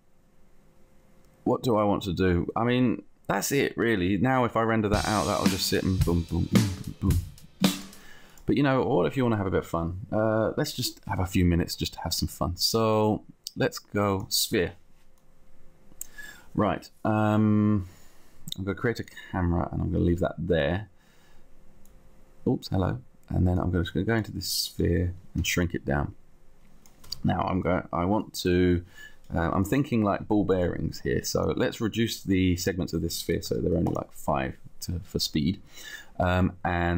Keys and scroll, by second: 25.6 t, 27.3 space, 28.5 space, 29.7 t, 30.9 t, 33.6 5, 34.9 5.